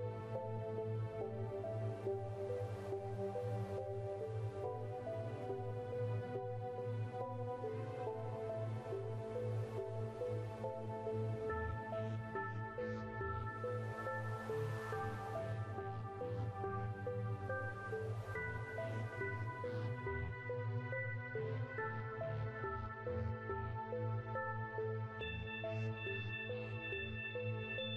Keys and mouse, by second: 0.2 click, 1.9 click, 3.2-4.4 drag, 4.8 shift+d, 5.7 click, 7.1-9.1 drag, 9.1 s, 10.1 click, 11.9 click, 13.8 shift+d, 14.7 click, 15.7-16.9 drag, 16.9 s, 18.0-19.4 drag, 19.6-20.8 right drag, 21.0 shift+d, 21.8 click, 23.5 KP_7, 24.2-24.6 KP_Add, 25.1-25.5 ctrl+KP_2, 26.4 r.